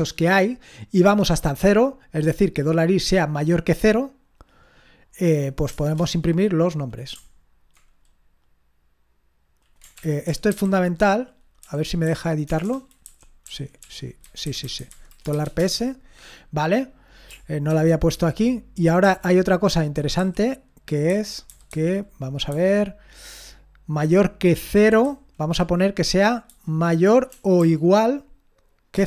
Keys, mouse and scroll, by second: 5.7 Return, 5.8 Return, 10.0 ctrl+p, 10.5 alt+b, 11.6-12.4 typing, 13.0 Down, 13.4 Up, 13.8 Up, 14.2 Left, 14.4 Left, 14.6 Left, 15.3 typing, 15.6 Return, 17.7 ctrl+p, 19.0 Up, 20.2 Down, 21.1 Left, 21.4 Left, 21.7 Left, 22.5-24.9 Left, 25.2 Left, 27.3 BackSpace, 27.6 e, 28.9 Return.